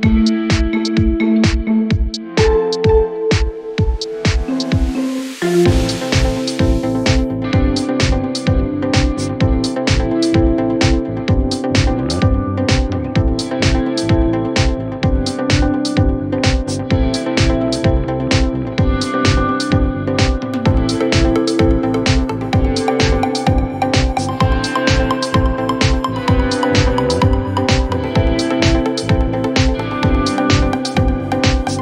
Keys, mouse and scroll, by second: 0.4 g, 3.6 shift+middle click, 4.1 r, 5.4 g, 8.3 r, 9.7 shift+middle click, 10.6 e, 11.2 g, 14.0 r, 15.8 g, 19.6 s, 21.2 Tab, 21.4 scroll down 4, 21.7 z, 22.0-23.0 middle drag, 23.0 click, 23.1 scroll up 4, 23.4-24.2 middle drag, 24.2 KP_1, 24.8 click, 24.9-25.4 scroll up 4, 25.1 Tab, 25.6 z, 26.0 scroll up 2, 26.4 scroll down 2, 27.1 shift+middle click, 27.6 g, 30.1 e.